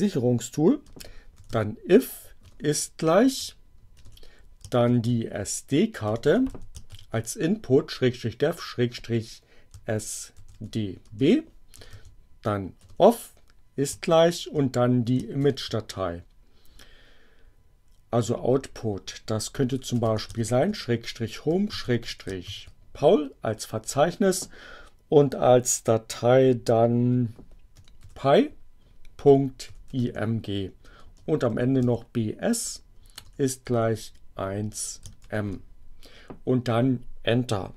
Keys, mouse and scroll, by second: 0.7-2.2 typing, 3.3-7.2 typing, 9.5-12.7 typing, 15.2 shift+7, 19.1-22.9 typing, 27.3-33.4 typing, 35.1 shift+m.